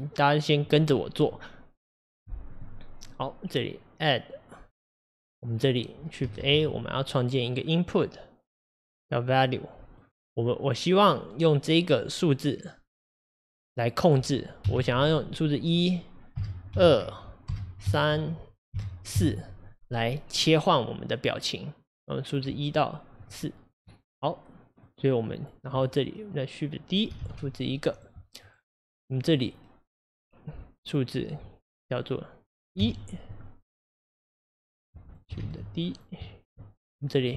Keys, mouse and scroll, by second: 27.2 shift+d, 29.3-35.1 drag, 35.4 shift+d.